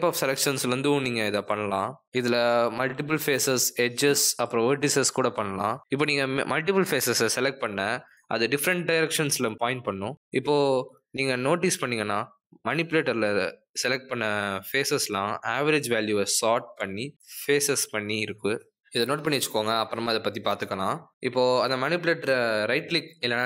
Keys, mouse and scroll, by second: 5.9 middle click, 7.6 middle click, 9.3 middle click, 12.8 middle click, 13.8 middle click, 17.6 middle click, 18.5 click, 18.9 middle click, 19.9 click.